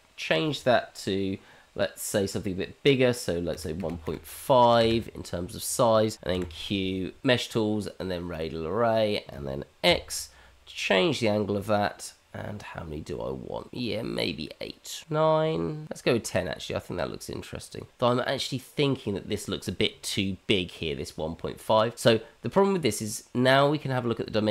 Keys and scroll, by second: 6.2 q.